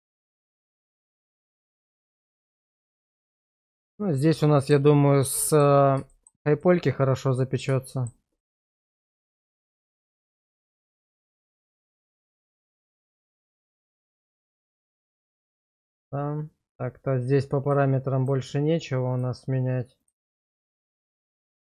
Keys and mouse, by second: 0.2 click, 1.4-3.1 middle drag, 3.5 shift+middle click, 4.2-4.7 middle drag, 5.5 shift+middle drag, 6.1 shift+middle drag, 6.6-7.6 middle drag, 7.9 shift+middle drag, 8.4-8.8 middle drag, 9.1 shift+middle drag, 9.7-10.7 middle drag, 11.0-12.5 shift+middle drag, 13.2-15.0 middle drag, 17.6 drag, 18.2 click, 19.1 click, 20.0 click.